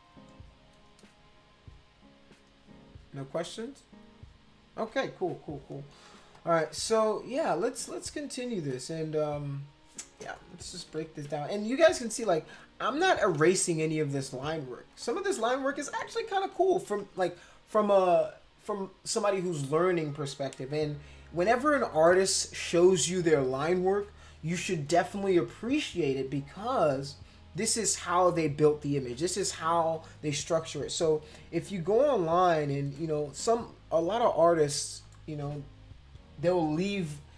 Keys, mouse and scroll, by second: 6.2 space, 6.3 click, 7.0 click, 7.5 click, 8.7-10.0 drag, 10.8 ctrl+=, 11.0 ctrl+=, 11.4 space, 11.8 click, 12.2 click, 14.9 space, 15.0 click, 16.5 ctrl+-, 32.9 click, 35.0 click.